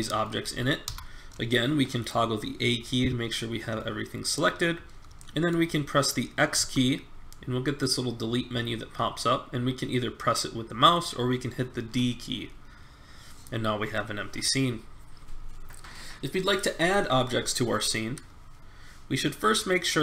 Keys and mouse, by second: 0.4 a, 0.8 a, 6.5 x.